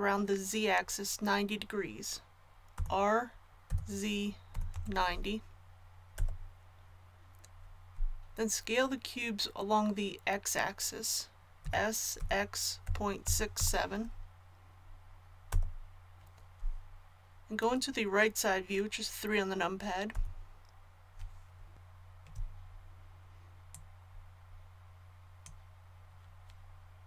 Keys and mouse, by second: 2.7 r, 11.6 s, 20.1 KP_3, 23.7-27.0 drag.